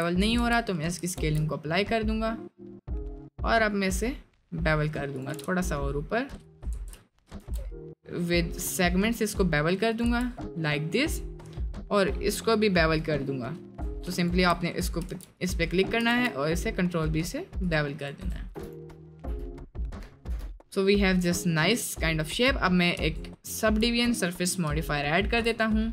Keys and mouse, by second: 0.4 Tab, 1.1 ctrl+b, 5.3 g, 6.7 ctrl+z, 10.0 Tab, 10.4 middle click, 13.9 Tab, 14.7 middle click, 15.1 ctrl+b, 16.3 ctrl+b, 18.3 Tab, 18.7 click, 19.2 l, 19.6 click, 19.8 middle click, 20.3 Tab, 20.5-20.9 middle drag, 21.2 middle click, 21.6 middle click, 23.0 ctrl+2, 24.1 right drag, 25.4 right click, 25.7 middle drag.